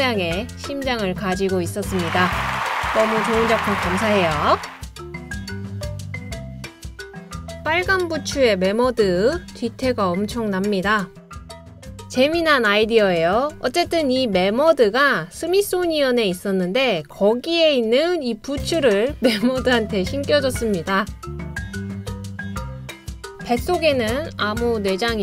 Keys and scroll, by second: 3.1-5.7 typing, 20.9 BackSpace, 23.1 t.